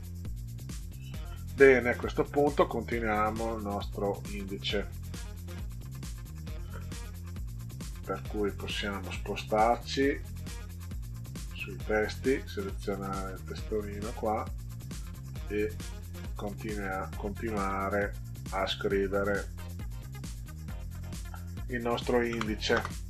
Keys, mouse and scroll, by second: 0.0 middle click, 0.8 ctrl+scroll down 2, 2.1 ctrl+scroll up 2, 3.2 middle click, 4.7 click, 5.9 click, 8.1 click, 9.7 click, 11.4 click, 12.2 click, 15.1 click, 16.8 middle click, 20.4 click, 20.7 click, 22.3 Return, 22.7 Return.